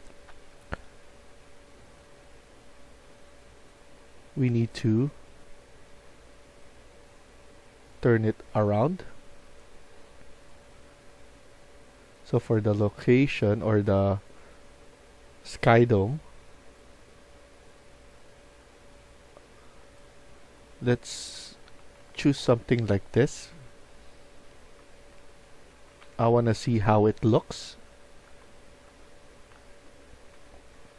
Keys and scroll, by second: 20.0-23.2 typing, 24.4-30.9 typing.